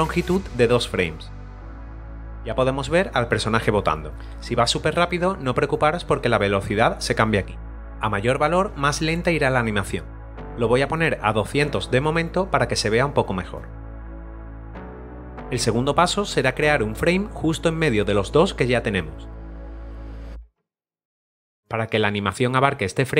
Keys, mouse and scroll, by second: 0.0-2.0 typing, 2.1 click, 6.6 click, 7.5 click, 13.8-14.8 typing, 14.2 click, 14.6 click, 19.7 click, 20.0 a, 20.0 right click, 20.1 click, 20.3 right click, 20.4 click, 20.8 right click, 20.9 click, 21.0 b, 23.0 click.